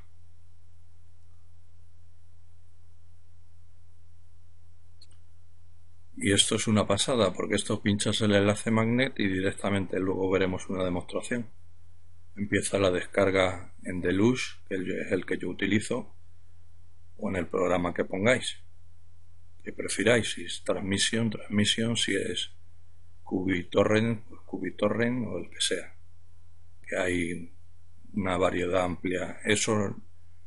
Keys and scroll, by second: 1.7-11.1 typing, 12.2-14.3 typing, 14.5 Return, 24.7 Up, 25.7-27.1 Left, 27.3 typing, 29.1 Delete, 30.0 Return.